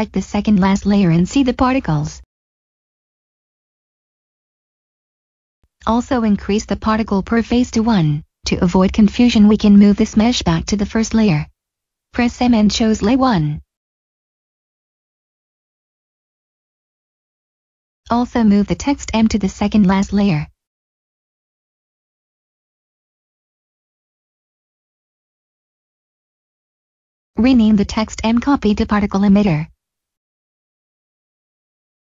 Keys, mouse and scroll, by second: 1.3 click, 10.6 m, 13.0 click, 18.5 m, 20.2 click, 21.1 middle click, 23.5 click, 26.8 click, 28.6-31.3 typing, 32.0 Return.